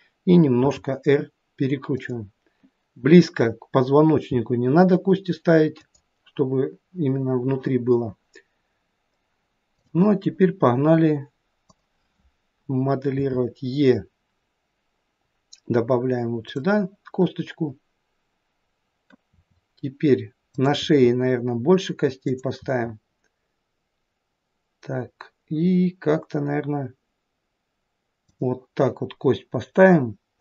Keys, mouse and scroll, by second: 0.6 r, 4.2 g, 9.8 click, 11.7 click, 13.2 e, 19.4 e, 20.9 e.